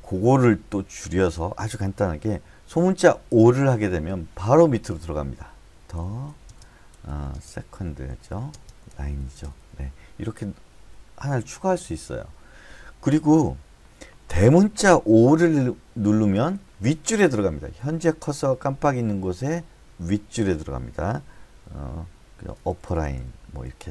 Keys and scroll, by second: 0.7 k, 3.3 o, 6.0-7.7 typing, 10.4 Escape, 16.2 o, 22.7-23.9 typing, 22.9 Up, 23.1 Up.